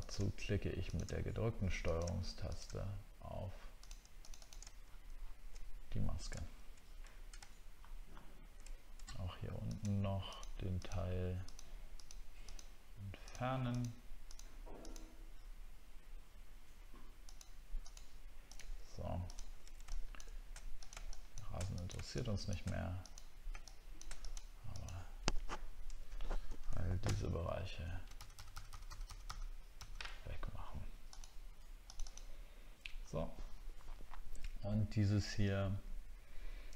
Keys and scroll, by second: 4.8 alt+scroll down 1, 6.4 alt+scroll down 1, 7.8 alt+scroll up 1, 8.4-10.8 alt+scroll up 1, 27.0 alt+-, 29.8 alt+-.